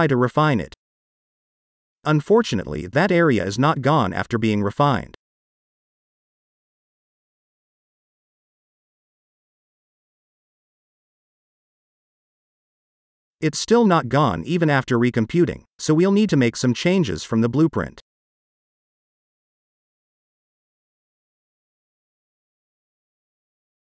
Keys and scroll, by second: 17.5 space, 21.6 space.